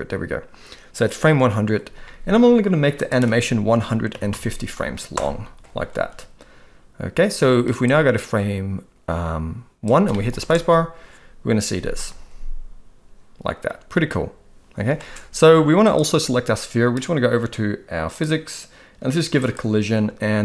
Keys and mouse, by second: 3.1-5.1 drag, 7.8-9.9 drag, 10.1 middle click, 10.5 space, 14.9 space, 15.8 click, 19.4 click.